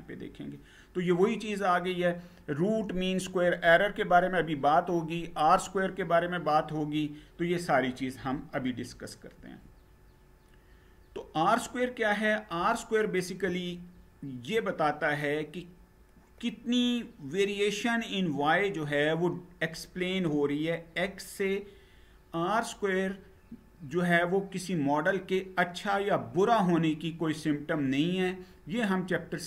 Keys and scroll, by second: 9.1 Page_Down.